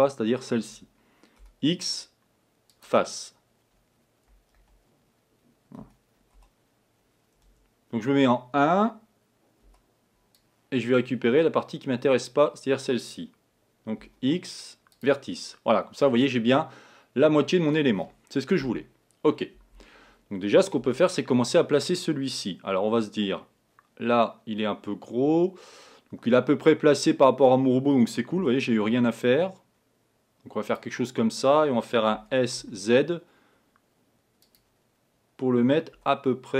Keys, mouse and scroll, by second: 1.4 x, 4.6 z, 5.9 a, 6.5 b, 8.2 1, 9.8 b, 14.1 x, 16.3-17.9 middle drag, 17.9-18.7 scroll up 2, 18.7 KP_1, 20.9 Tab, 28.4 g, 32.2 s, 35.9 g.